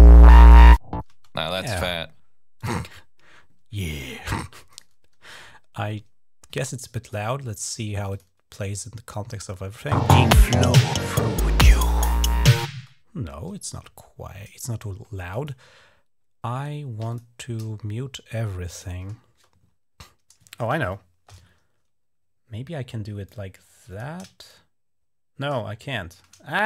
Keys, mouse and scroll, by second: 2.4 click, 4.5 click, 4.6 click, 6.5 click, 7.9 click, 9.7 space, 12.5 space, 15.1 click, 16.9 shift+click, 18.5 click, 20.6 shift+l, 23.0 click, 24.3-26.6 shift+drag, 26.4 Escape.